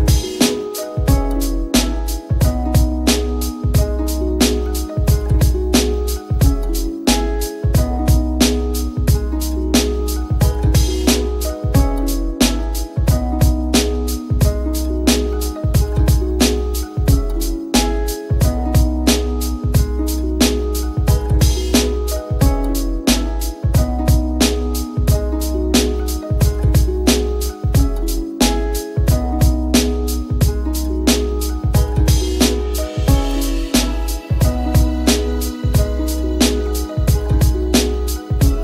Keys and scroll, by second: 1.6 t, 38.1 F10, 38.2 F10.